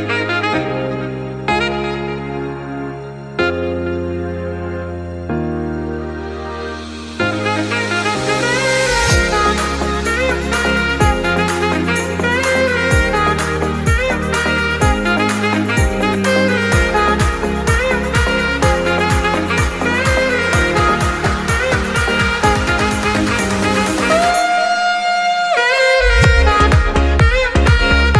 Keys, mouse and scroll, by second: 0.2 scroll down 2, 0.7-2.5 shift+middle drag, 2.5 ctrl+s, 4.5 click, 5.9-9.0 drag, 10.8 ctrl+s, 11.6-12.2 scroll up 2, 17.1 scroll up 1, 19.4-22.5 middle drag, 24.6-25.3 scroll down 1, 25.3-25.6 drag, 25.6 scroll down 1, 26.6 click, 27.5 click.